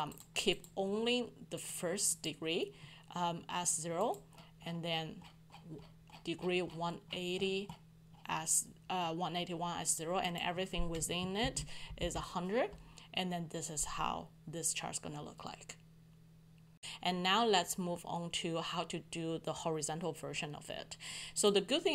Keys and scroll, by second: 11.4 ctrl+Up, 12.0 ctrl+Down.